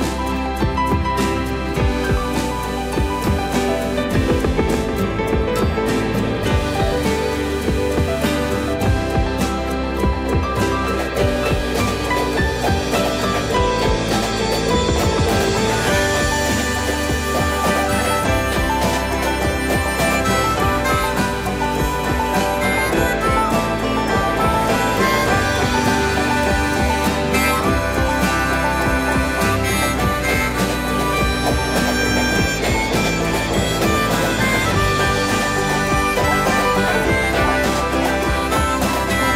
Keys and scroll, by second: 1.3 m, 3.6 shift+space, 8.4 m, 10.7 shift+space, 11.5 m, 14.2 shift+space, 14.2 Escape, 24.4 shift+space, 24.4 Escape, 27.3 m, 32.2 shift+space, 36.8 m.